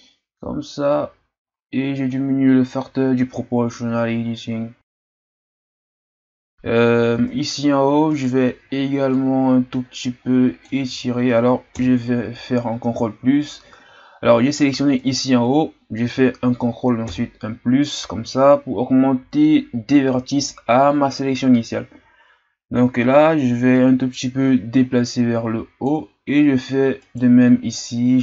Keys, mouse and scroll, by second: 5.9 z, 6.0 Tab, 6.2 scroll down 1, 6.4-7.1 scroll up 3, 7.1 Tab, 8.1-9.1 right drag, 9.1-10.8 drag, 10.8 ctrl+z, 11.7 ctrl+KP_Add, 15.0-17.1 right drag, 17.1 ctrl+KP_Add, 22.8-25.8 drag, 27.0 right click, 27.7-28.2 drag.